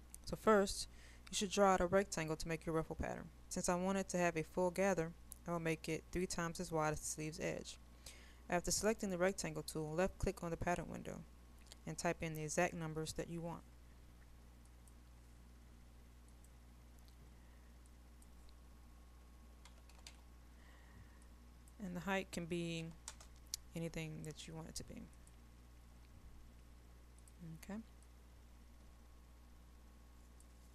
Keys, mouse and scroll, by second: 25.7-30.7 drag.